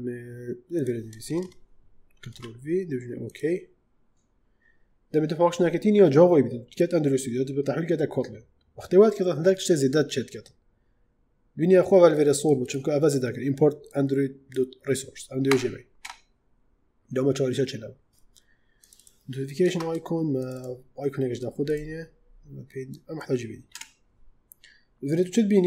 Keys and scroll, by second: 1.0 Return, 2.2 ctrl+v, 15.4 BackSpace, 19.5 ctrl+space, 23.6 BackSpace.